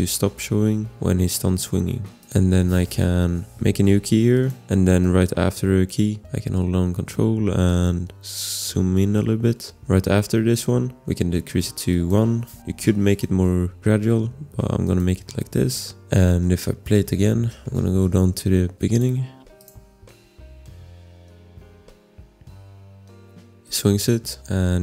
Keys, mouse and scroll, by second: 2.2 click, 6.2 ctrl+scroll, 7.7 click, 8.8 ctrl+scroll, 9.9 click, 9.9 scroll, 12.5 1, 12.7 Return, 14.8 click, 16.0 ctrl+scroll, 17.4-18.7 scroll, 18.7 click, 19.6 click.